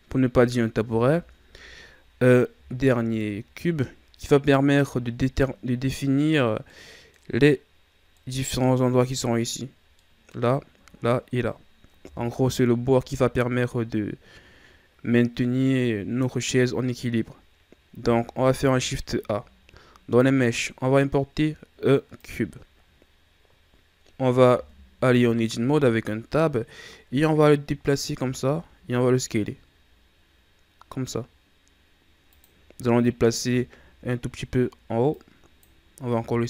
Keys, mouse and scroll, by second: 0.8 KP_1, 2.7-3.6 ctrl+scroll down 1, 3.6 scroll up 1, 5.0-6.5 scroll up 3, 6.5 scroll down 1, 6.7-12.0 middle drag, 12.0 KP_1, 18.4 shift+a, 24.5 Tab, 26.0-28.0 drag, 28.0 s, 32.9-33.6 scroll up 2, 33.6-34.2 shift+scroll down 3, 34.2-35.1 scroll up 1, 35.1-36.1 drag, 36.1 s.